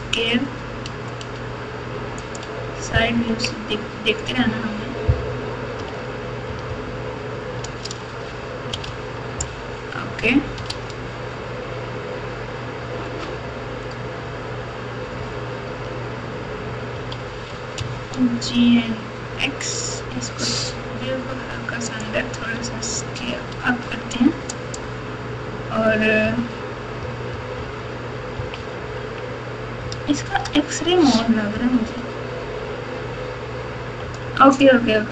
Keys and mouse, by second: 3.1 KP_1, 3.4 KP_3, 5.8 alt+z, 6.4 KP_4, 6.6 KP_4, 8.8 alt+z, 10.6 alt+z, 16.9 g, 22.5 s, 26.2-29.1 typing, 29.8 KP_Add, 30.3 KP_Add, 30.4 KP_Add, 31.5 KP_4, 31.8 KP_4.